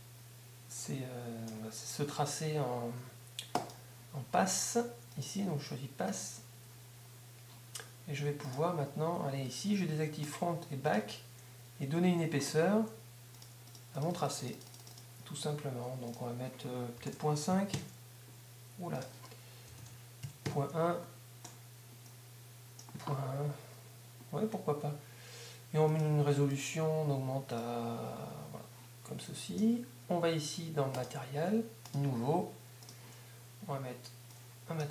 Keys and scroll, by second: 17.1 shift+., 17.8 Home, 20.2 shift+..